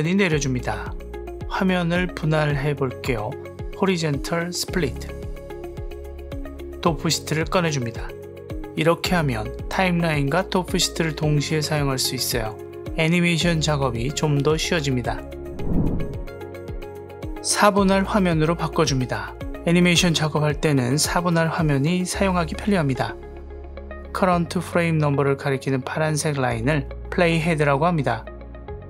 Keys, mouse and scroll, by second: 7.0 shift+F12, 7.8 shift+F12, 17.2 ctrl+alt+q.